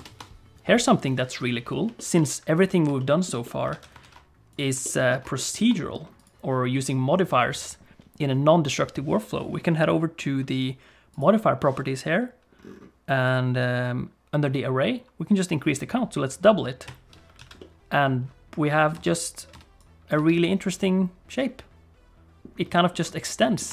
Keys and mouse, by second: 0.0 ctrl+space, 2.0 shift+click, 2.2 click, 3.0 shift+click, 3.4 middle click, 3.7 alt+a, 4.0 ctrl+s, 4.5 click, 4.8 shift+click, 5.3 ctrl+middle click, 5.7 middle click, 6.2 click, 11.1 click, 13.3 click, 17.0 click, 17.4 alt+a, 17.6-18.9 middle drag, 18.9 space, 19.5 space, 19.8 click, 21.4-22.4 middle drag, 23.4 click.